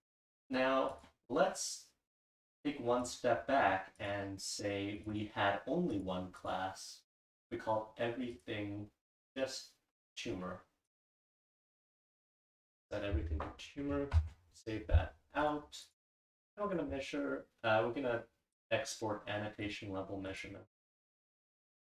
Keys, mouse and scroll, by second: 5.0 click, 5.1 click, 5.9 click, 7.4 click, 8.3 click, 9.1 click, 10.0 click, 10.9 click, 12.1 click, 12.5 click, 12.7 click, 15.0 ctrl+s, 15.8 click.